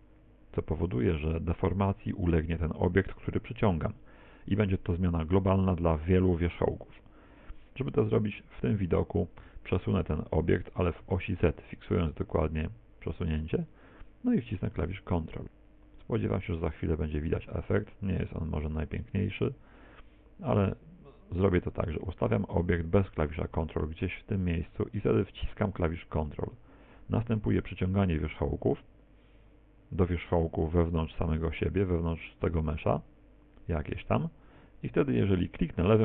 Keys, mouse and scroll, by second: 9.5 g.